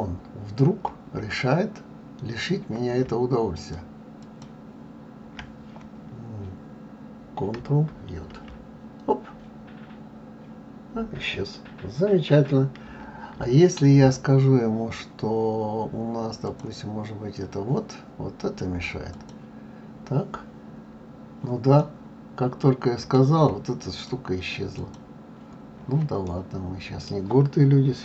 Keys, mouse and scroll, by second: 3.5 shift+click, 4.2 shift+click, 8.5 ctrl+j, 12.8 ctrl+z, 16.4-19.5 drag, 21.8-23.9 middle drag, 23.9 click, 24.7 click, 26.2-28.0 middle drag.